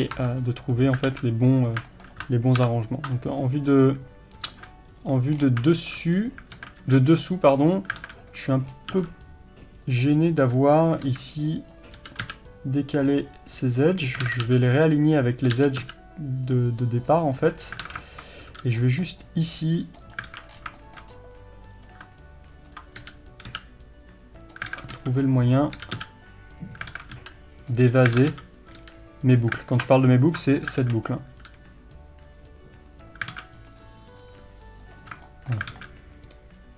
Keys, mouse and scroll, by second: 0.0 scroll up 2, 0.2 Tab, 0.9 scroll up 2, 1.1 alt+a, 2.6 ctrl+KP_7, 3.5-4.7 scroll up 2, 4.7-5.1 scroll up 1, 5.1 click, 5.4-5.8 scroll down 1, 5.8-12.1 shift+middle drag, 6.2-6.6 scroll up 1, 6.6 alt+a, 7.5 b, 8.1 alt+a, 8.8-9.9 scroll up 1, 9.9 b, 14.1 click, 14.3 alt+a, 15.1 b, 17.9 alt+a, 18.1-20.2 shift+middle drag, 19.1 c, 20.2 right click, 20.3 alt+a, 20.6 scroll down 1, 20.8-21.8 shift+middle drag, 21.2 scroll up 1, 21.8 click, 23.1 g, 24.6 click, 24.8 alt+a, 25.6 b, 27.0 alt+a, 27.8 b, 28.2 alt+a, 28.6 b, 30.1 ctrl+alt+click, 30.9 alt+a, 31.0 click, 31.4 g, 33.4 alt+a, 33.6 click, 34.3 g, 35.3-36.7 shift+middle drag, 35.8 alt+a.